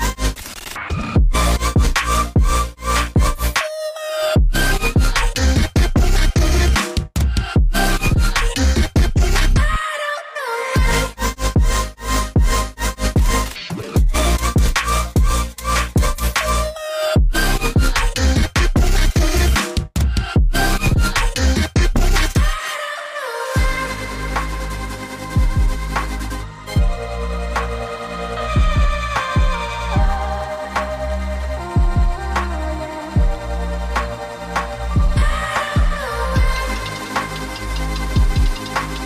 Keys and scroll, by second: 2.8 Tab, 2.9 Tab, 3.1 Tab, 6.7-7.1 typing, 7.6 Tab, 7.7 Tab, 8.2 Tab, 8.4 Tab, 8.6 Tab, 9.0 Tab, 9.1 Tab, 9.3 Tab, 9.6 Tab, 9.9 Tab, 18.3 2, 19.4 Tab, 20.6 shift+Tab, 23.2 Up, 25.1 Up, 26.1 Up, 32.0 Up.